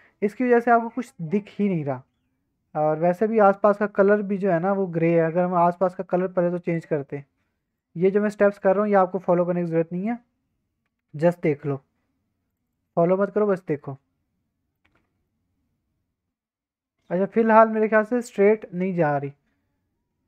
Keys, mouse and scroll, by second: 1.2 middle click, 1.6-2.7 scroll up 1, 5.6 click, 6.6-7.8 drag, 8.5 drag, 13.7-14.7 middle drag, 14.9 alt+a, 15.2-16.1 middle drag, 16.8-17.3 drag, 17.3 middle click, 18.9-20.2 middle drag.